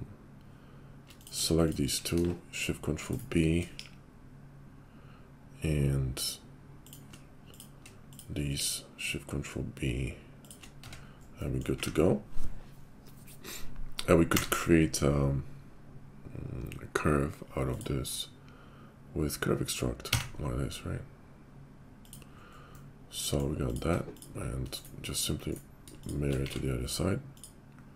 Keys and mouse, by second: 1.0 click, 1.2-3.2 shift+middle drag, 2.1 shift+KP_5, 3.2-24.1 drag, 3.7 ctrl+shift+b, 8.5 ctrl+shift+b, 10.8 Tab, 11.7 `, 14.3 q, 24.1-26.1 shift+middle drag, 26.1-27.9 alt+shift+drag, 26.4 alt+x.